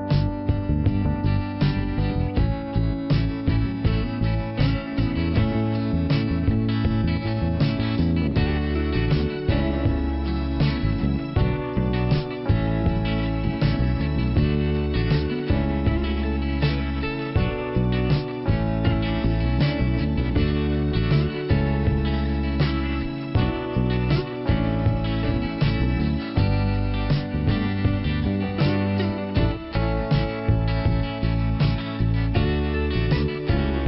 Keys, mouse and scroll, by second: 0.6 click, 3.7 click, 5.7 click, 7.3 click, 10.2 scroll up 1, 10.8 click, 11.1 Delete, 12.9 click, 13.5 Delete, 15.1 click, 15.5 right click, 16.6 click, 17.9 click, 18.6 click, 19.1 click, 21.6 click, 22.0 click, 22.1 double click, 22.9 double click, 23.4 double click, 23.5 double click, 23.8 scroll down 1, 24.4 right click, 26.5 middle click, 27.9 middle click, 28.7-29.9 scroll up 1, 29.9 scroll up 1, 30.0 click, 31.0 click, 31.8 click.